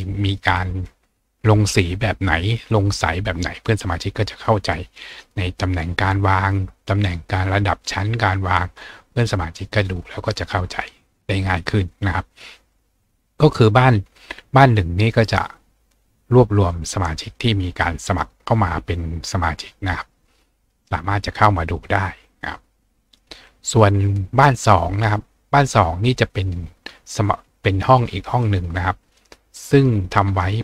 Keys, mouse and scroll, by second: 22.6-23.7 scroll down 2, 28.4 click.